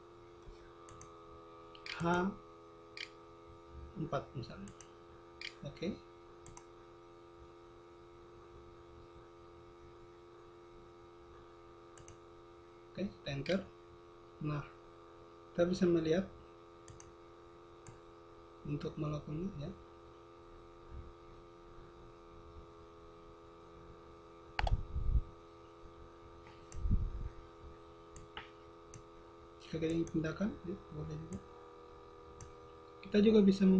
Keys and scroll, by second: 1.5 c, 2.6 h, 5.2 4, 10.9 Delete, 12.5 Return.